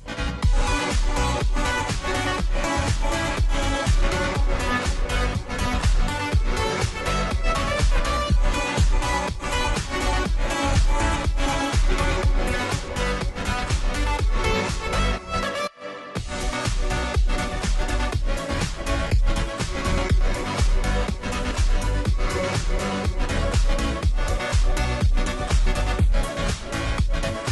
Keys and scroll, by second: 0.0-27.5 typing.